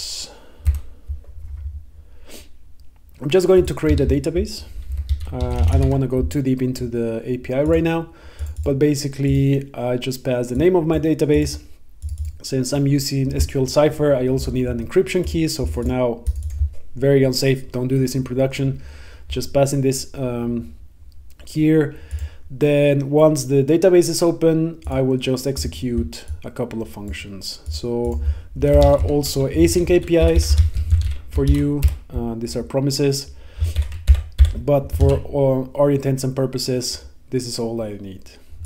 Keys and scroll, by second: 0.8 super+v, 5.2 Left, 28.7 Return, 31.6 Down, 31.9 Return, 33.8 super+BackSpace, 36.3 super+s.